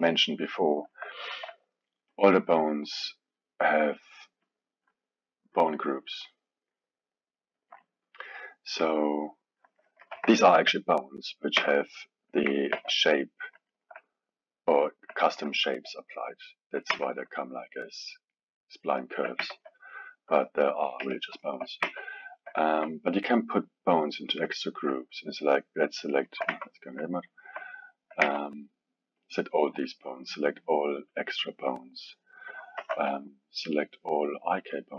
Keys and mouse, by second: 1.2-2.1 alt+middle drag, 2.1 click, 4.4 click, 5.5-9.8 drag, 9.8 middle click, 10.0 KP_1, 10.3-11.6 alt+middle drag, 11.6 Tab, 12.8 shift+z, 13.2-17.0 middle drag, 17.0 Tab, 18.0-19.4 middle drag, 19.4 Tab, 19.6-21.0 middle drag, 21.0 KP_1, 21.4-21.9 alt+middle drag, 21.9 Tab, 22.6-23.9 ctrl+middle drag, 23.9 click, 25.6-26.2 drag, 26.2 alt+middle click, 26.5 Tab, 27.3-28.3 alt+middle drag, 28.3 Tab, 29.2-30.3 drag, 31.1 click, 32.9 alt+a, 34.3 click.